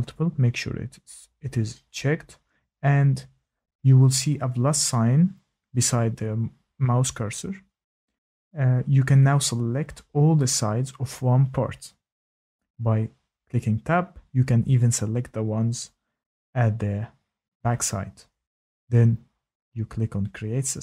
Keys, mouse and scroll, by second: 7.7 click, 9.2 Tab, 9.8 click, 10.2 Tab, 11.8 Tab, 12.4 click, 14.3 Tab, 14.4 Tab, 14.9 Tab, 15.3 Tab, 16.6 Tab, 17.3 click.